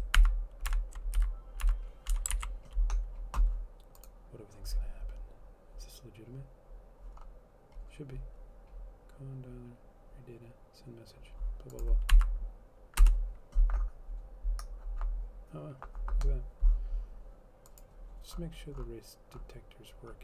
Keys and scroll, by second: 0.3 alt+Up, 0.9 alt+Up, 1.4 Down, 2.3 Up, 2.3-2.6 typing, 2.6 ctrl+s, 13.2 shift+Return.